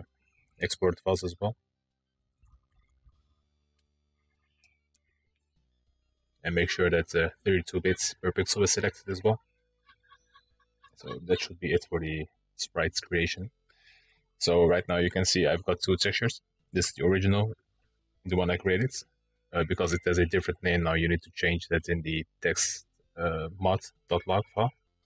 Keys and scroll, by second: 0.8-2.7 typing.